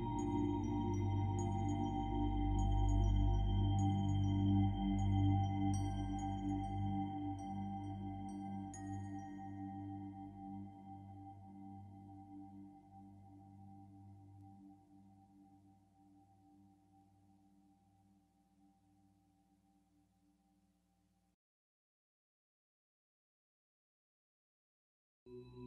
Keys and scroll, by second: 0.0-0.4 typing, 2.3 ctrl+z, 4.3 ctrl+z, 7.0 ctrl+z, 7.9 typing, 15.6 i, 21.6 b, 25.2 ctrl+z.